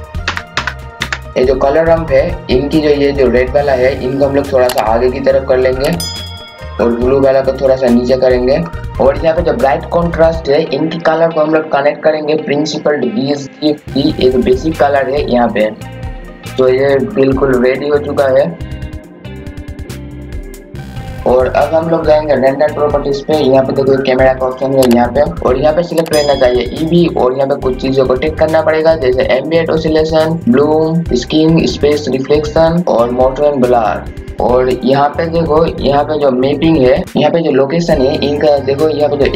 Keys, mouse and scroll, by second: 0.0-0.2 typing, 1.3-16.4 drag, 16.5 scroll down 1, 17.8-39.3 drag.